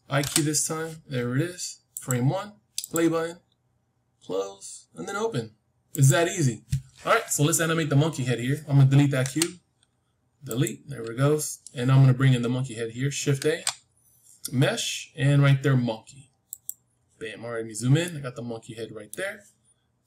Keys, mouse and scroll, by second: 0.1 i, 1.8-4.7 drag, 5.8-8.0 drag, 8.0-10.6 middle drag, 9.2 x, 13.3 shift+a, 17.2-20.0 middle drag.